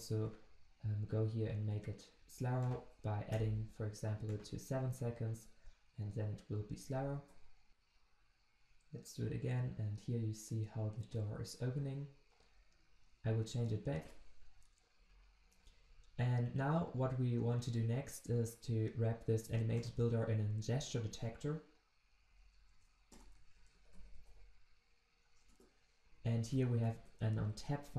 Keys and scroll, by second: 7.3 ctrl+shift+\, 20.8 alt+Return, 25.5 Return.